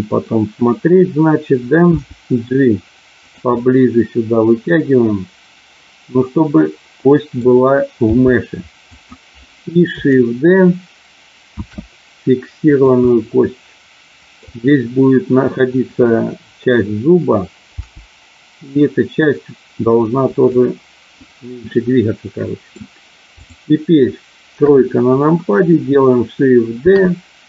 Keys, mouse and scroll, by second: 1.9 g, 3.2 click, 3.5-7.4 middle drag, 7.9 g, 8.9 click, 11.4 shift+d, 12.5 click, 13.0-14.4 middle drag, 17.7 g, 20.3 click, 21.7-22.7 middle drag, 23.4 click, 24.7 KP_3, 26.8 shift+d.